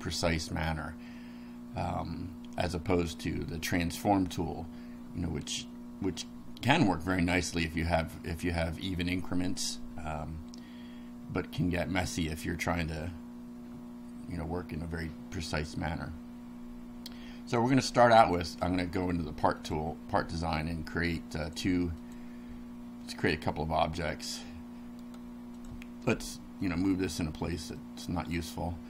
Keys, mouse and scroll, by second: 18.5 click, 19.6 click, 21.5 click, 22.0 click, 24.2 click, 25.0 right click, 25.6 click, 26.7 click, 27.7-28.5 middle drag.